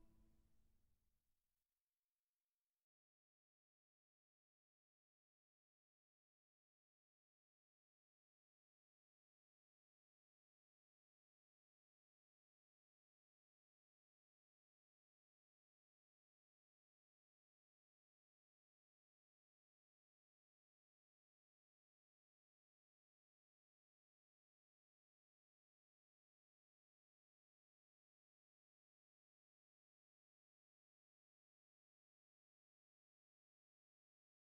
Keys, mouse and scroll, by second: 1.9 shift+a, 4.7-7.0 drag, 6.2 s, 9.0-11.2 drag, 10.2 s, 13.2 w, 15.6 Tab, 17.0 w, 22.7 s, 26.0 s, 32.3-34.4 drag.